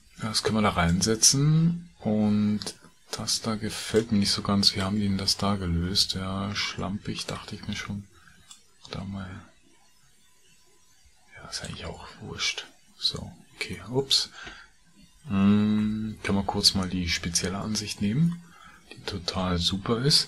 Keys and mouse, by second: 0.0 Tab, 0.7-4.0 drag, 15.8 KP_Divide, 17.6-18.3 middle drag.